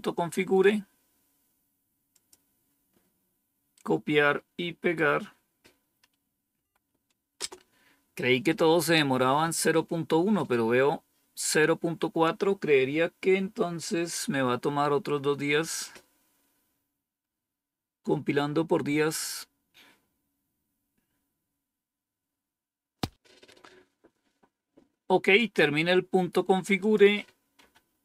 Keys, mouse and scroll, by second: 2.0 click, 3.7-4.9 right drag, 6.4 Right, 7.3 Return, 26.7 click, 27.5 Up.